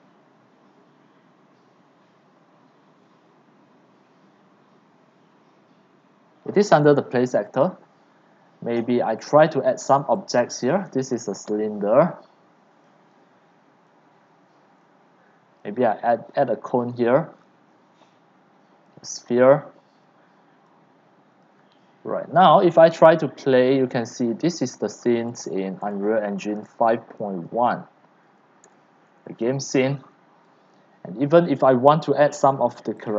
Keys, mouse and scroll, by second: 7.0 right click, 9.2 click, 9.7 click, 10.1 click, 13.8 click, 14.0 click, 14.6 click, 15.9 click, 17.0-17.8 scroll, 18.9 click, 19.3 scroll down 8, 20.0 w, 20.6 right click, 23.4 click, 24.1-27.3 typing, 28.5-30.3 typing, 30.6 click, 33.0 click.